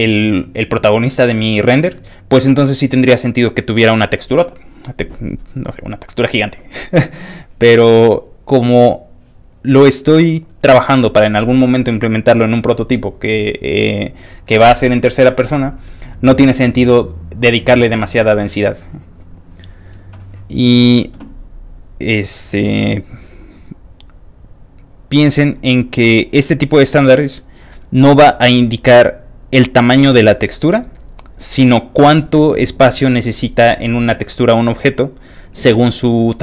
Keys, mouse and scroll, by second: 19.2 click, 19.3 click, 21.7 click, 22.4 click, 23.1 click, 23.8 click, 24.5 click, 26.0 click, 26.8 click, 27.5 click, 28.0 click, 28.5 click, 29.4 click, 30.1 click, 31.0 click, 31.7 click, 34.7 click.